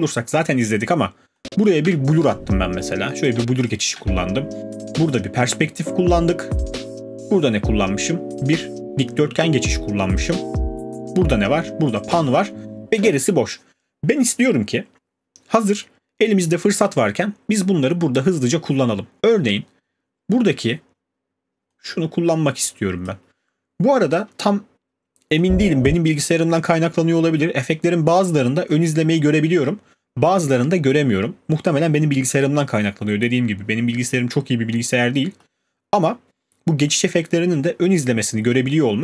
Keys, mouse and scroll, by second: 1.8 click, 1.8 space, 3.3 space, 3.7 click, 4.0 space, 15.5 middle click, 15.7 middle click, 16.3 scroll, 23.0 click, 26.2 click, 36.0-37.8 scroll.